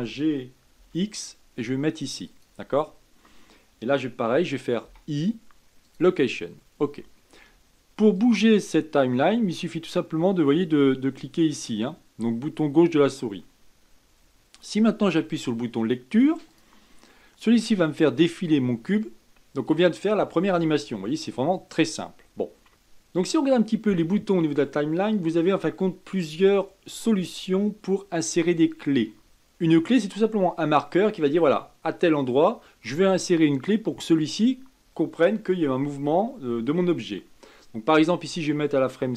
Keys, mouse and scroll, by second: 8.2-11.2 drag, 16.5 click.